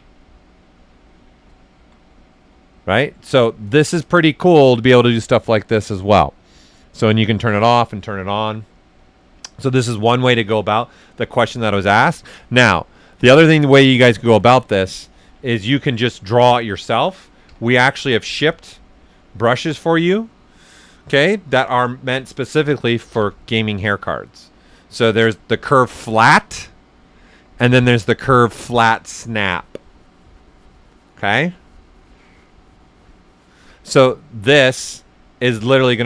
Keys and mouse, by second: 0.1 right click, 3.4 ctrl+z, 4.0 right click, 6.2 click, 11.9 right click, 12.9 click, 15.4 alt+right click, 17.4 b, 23.1 typing, 34.8-36.0 drag, 34.8 typing.